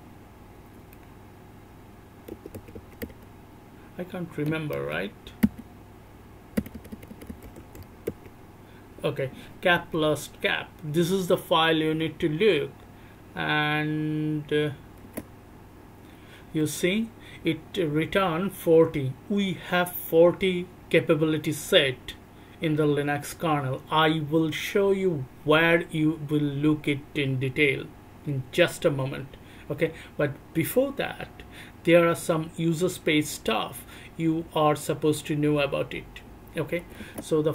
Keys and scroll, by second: 2.3 Tab, 2.5 Tab, 3.0 BackSpace, 4.7 _, 5.4 BackSpace, 6.5-7.6 typing, 8.0 Tab, 15.0 Return, 36.8 c, 37.0 Return.